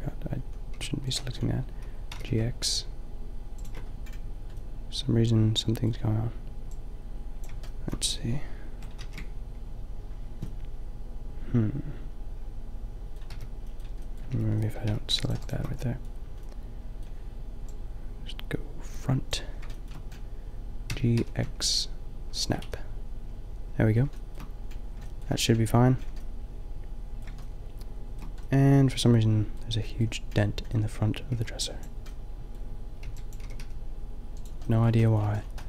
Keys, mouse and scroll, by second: 0.7 g, 2.1 g, 5.1 middle click, 8.3 click, 8.9 ctrl+z, 13.3 b, 14.1 click, 14.3 b, 15.3-17.6 drag, 15.3 b, 20.8 g, 22.6 a, 27.0 middle click, 27.6-28.7 middle drag, 29.0 middle click, 29.5 middle click, 31.4 b, 32.3 middle click, 33.1 b, 33.4 g, 33.6-35.6 middle drag.